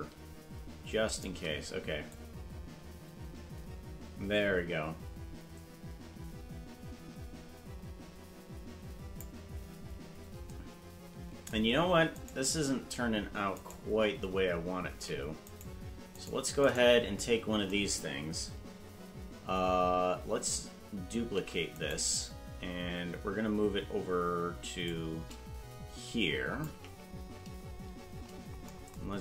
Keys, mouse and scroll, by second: 2.1-9.2 drag, 12.2 right click, 13.5 right click, 14.9 ctrl+Tab, 15.5 right click, 16.2 right click, 16.7 right click, 21.2 shift+d, 24.8-26.6 shift+drag, 27.9-28.5 scroll down 9.